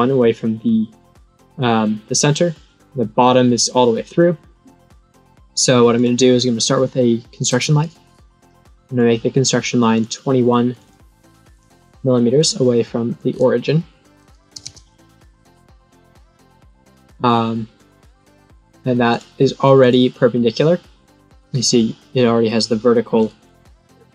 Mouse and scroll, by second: 5.9 click, 7.5 click, 8.8 click, 9.9 click, 10.7 click, 11.5 click, 12.3 click, 13.1 click, 15.7 right click, 16.3 click, 17.7-18.7 drag, 19.1 click, 19.7 click, 21.1 click.